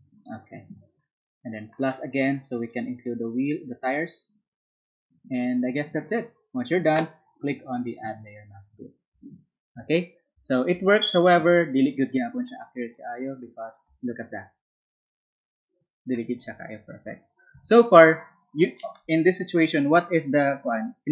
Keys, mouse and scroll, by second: 15.7 space.